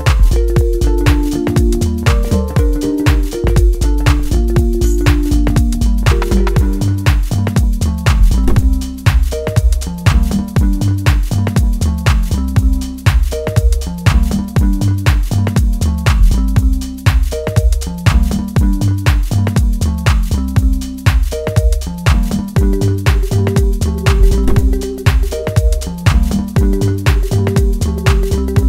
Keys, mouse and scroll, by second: 1.2-2.7 middle drag, 2.7-7.2 drag, 7.2-12.2 middle drag, 12.2 click, 13.0-14.7 middle drag, 14.7 click, 17.4 click, 17.9-19.7 middle drag, 19.7-20.2 scroll up 2, 20.2 shift+middle click, 21.0 scroll up 1, 21.4-24.9 middle drag, 24.9 click, 27.2 click, 27.8 middle click.